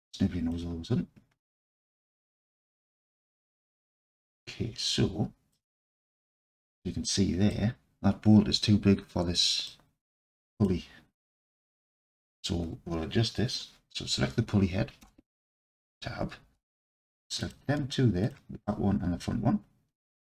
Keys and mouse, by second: 3.9-5.5 alt+drag, 6.3 alt+z, 6.8-7.5 alt+drag, 9.8 alt+click, 10.6 click, 15.0 Tab, 16.5 alt+z, 18.7-20.2 alt+drag.